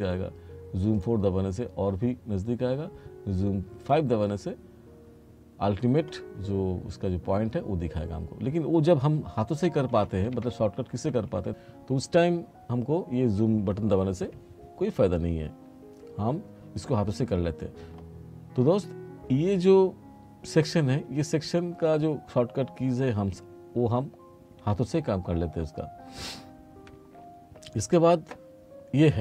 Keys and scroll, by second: 9.7 r.